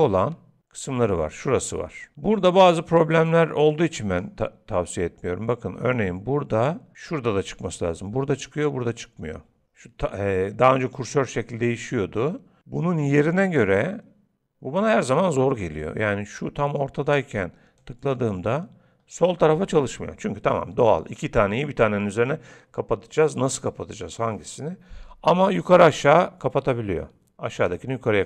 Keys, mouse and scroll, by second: 3.7 click, 17.8 click.